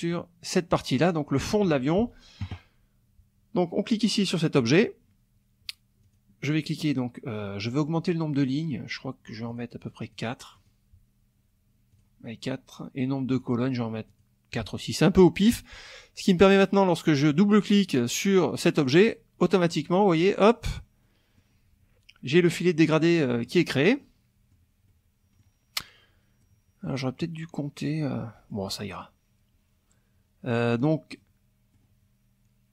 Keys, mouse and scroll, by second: 4.6 click, 6.0 click, 9.5 click, 10.6 click, 11.9 click, 13.3 click, 14.1 click, 18.8 click, 21.0 middle click, 23.3 middle click, 24.0 middle click, 24.8 click, 26.4 click, 27.9 click, 29.0-31.9 drag.